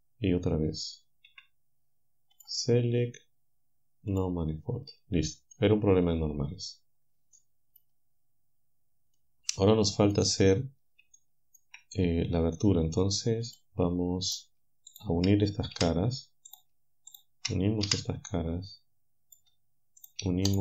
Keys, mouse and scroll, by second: 1.3 a, 2.4 click, 4.1 click, 5.5-8.0 drag, 8.6-9.2 scroll down 1, 9.2-10.3 drag, 11.2 shift+click, 13.5 click, 15.8 f, 16.8 shift+click, 17.9 f, 18.3-19.7 drag, 20.5 shift+click.